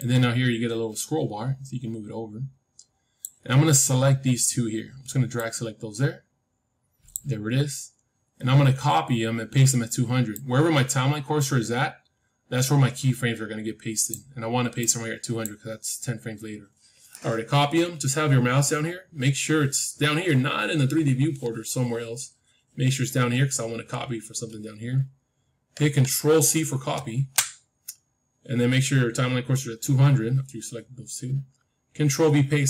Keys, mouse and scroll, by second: 5.3-7.8 drag, 10.3-12.3 drag, 14.7-16.7 drag, 26.9 ctrl+c.